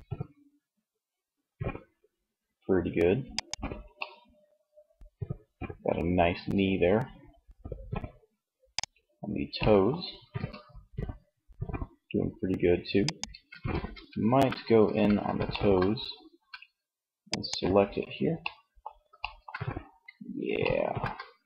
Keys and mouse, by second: 2.9-4.4 middle drag, 7.9-9.3 middle drag, 9.3 r, 12.2 click, 12.4 ctrl+z, 12.8 Tab, 13.1 a, 14.0 a, 15.3 a.